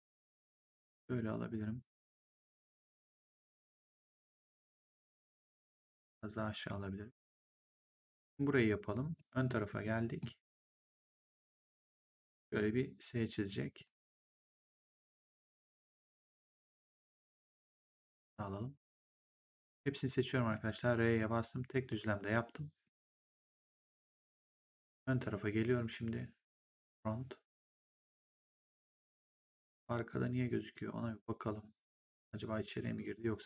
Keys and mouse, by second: 0.2 click, 2.7 click, 5.6 click, 9.8 middle click, 10.9 middle click, 13.7 click, 15.4 click, 17.8 click, 19.2 click, 20.4 r, 21.1 click, 22.9 w, 25.6 right click, 26.8 click, 30.0 click, 32.1 right click, 32.7 click.